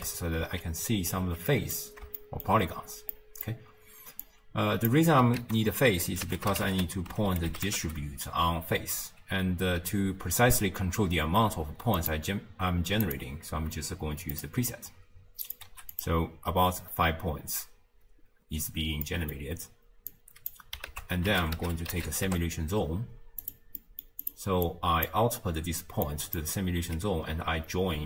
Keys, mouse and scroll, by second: 0.5 space, 1.3 space, 1.5 middle click, 1.9-2.2 scroll up 2, 2.2-4.3 shift+middle drag, 4.3 click, 5.4 ctrl+a, 14.4 middle click, 14.5-15.4 scroll up 1, 15.4 click, 17.0-19.1 scroll down 3, 19.1-20.2 middle drag, 20.2 click, 20.9 ctrl+a, 23.8-24.2 middle drag, 24.2 click, 24.7 click, 26.1 click.